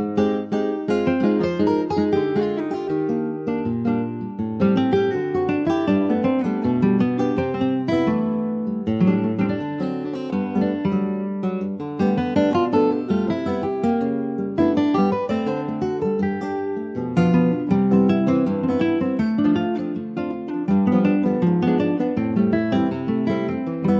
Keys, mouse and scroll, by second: 0.4-3.4 drag, 3.4 middle click, 3.6-4.0 scroll up 2, 4.0-6.4 middle drag, 6.4 Tab, 6.6 scroll down 4, 6.8 middle click, 7.2 click, 7.7 ctrl+s, 7.9 click, 8.2-9.1 scroll up 2, 8.5 middle click, 9.1 Tab, 9.4 click, 9.7 middle click, 10.0 Tab, 10.3-11.1 scroll down 3, 10.5 click, 11.1 middle click, 11.3 scroll up 2, 11.5 ctrl+s, 11.6 click, 11.9 scroll up 1, 12.2 Tab, 12.6 middle click, 13.1 scroll up 2, 13.5 middle click, 13.9 scroll up 1, 14.9 click, 16.7 middle click, 17.6 shift+click, 18.0-19.0 middle drag, 19.0 shift+click, 19.4-20.9 middle drag, 20.9 shift+click, 21.3 middle click, 21.9 ctrl+b.